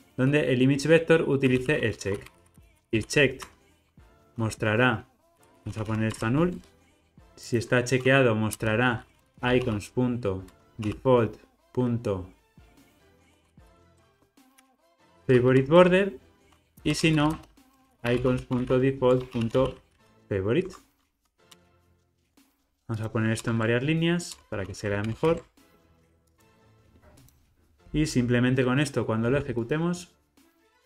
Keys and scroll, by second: 6.1 Return, 8.1 Return, 10.6 Return, 12.9 Return, 15.9 Return, 24.3 alt+Return, 25.1 alt+super+l, 25.3 alt+shift+super+o, 27.9 ctrl+r.